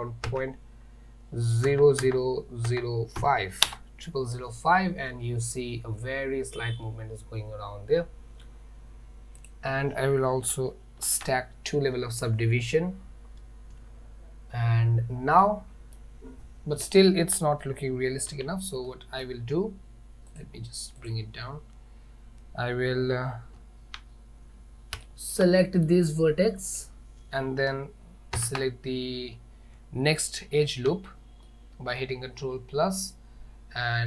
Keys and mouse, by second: 9.4 click, 11.2 ctrl+2, 15.5-16.0 middle drag, 18.4 Tab, 18.9 middle click, 20.4 click, 21.0 click, 23.6 z, 25.1 shift+middle click, 25.7 middle click, 28.4 ctrl+KP_Add, 30.5 z, 31.5 middle click.